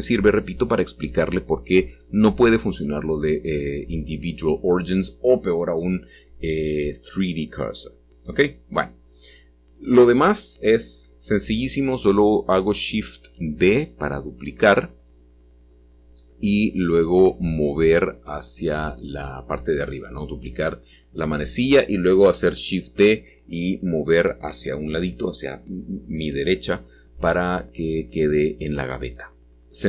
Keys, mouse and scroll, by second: 4.4 shift+click, 5.3 shift+middle click, 7.8-10.6 shift+middle drag, 11.4-12.5 middle drag, 13.5 g, 18.9 shift+middle click, 25.0 middle click, 25.7-28.6 scroll down 2, 28.6-29.4 scroll down 1, 29.4-29.8 middle drag, 29.4 KP_7.